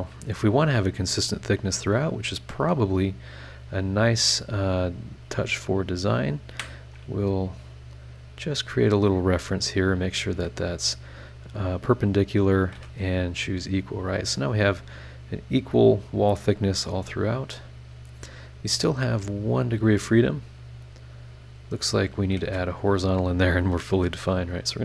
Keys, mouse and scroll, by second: 1.7 click, 2.6 click, 4.4 click, 6.2 click, 6.5 Escape, 7.5 click, 8.5 click, 9.1 click, 9.9 click, 10.3 Escape, 10.9 click, 11.7 click, 12.7 e, 19.2 click, 20.2 click, 20.8 click, 22.1 click, 22.4 h, 23.2 scroll down 2, 24.2 click.